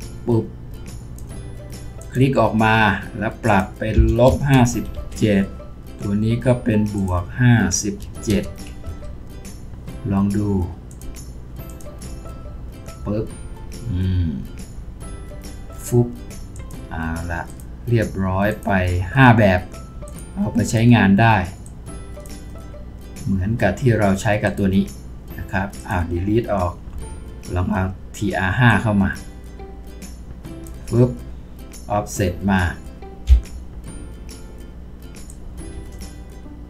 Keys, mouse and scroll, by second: 3.9-4.5 typing, 4.9 Return, 8.0 typing, 8.8 Return, 26.9 Delete, 33.3 v.